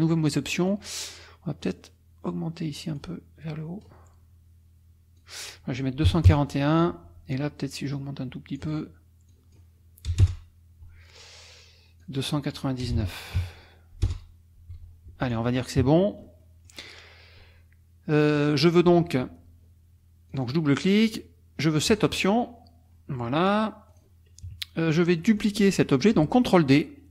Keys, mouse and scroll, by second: 0.7 click, 2.8 click, 3.0 9, 5.2 click, 6.0 KP_1, 6.3 KP_Enter, 7.9 click, 9.3 click, 10.1 BackSpace, 10.2 Return, 12.0 click, 12.8 BackSpace, 13.4 KP_9, 14.1 Return, 15.1 F1, 15.2 click, 15.8 KP_Subtract, 16.4 click, 18.3 click, 20.3-20.7 drag, 21.9 click, 23.4 click, 23.9 click, 24.4 KP_Subtract, 25.2 click, 25.4-26.6 scroll up 1, 26.6-27.1 scroll up 1.